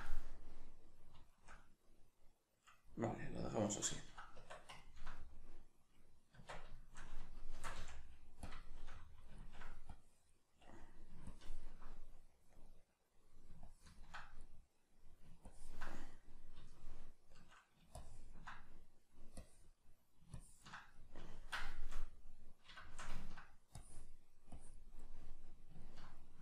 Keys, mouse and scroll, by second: 4.4 Tab, 6.3 Tab, 7.5 shift+c, 8.5 click, 9.9-12.6 drag, 12.6-13.7 middle drag, 13.7 ctrl+click, 14.4-15.5 middle drag, 15.5 ctrl+click, 16.1-18.0 middle drag, 18.0-21.0 ctrl+drag, 21.0-23.8 middle drag, 23.8-25.1 drag, 25.1-26.4 middle drag.